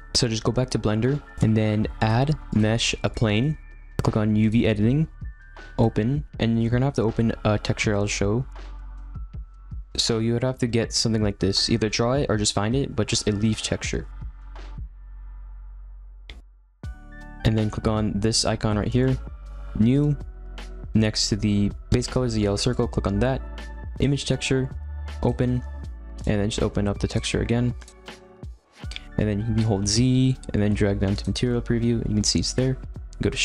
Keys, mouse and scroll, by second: 0.0 =, 1.3 middle click, 2.0-3.4 drag, 3.4-4.4 middle drag, 4.4 click, 5.8-10.0 drag, 14.1-16.0 middle drag, 16.0-17.3 alt+scroll up 1, 20.0-28.4 drag, 28.4-30.0 scroll up 3, 30.0-31.4 z, 32.3-33.4 scroll up 1.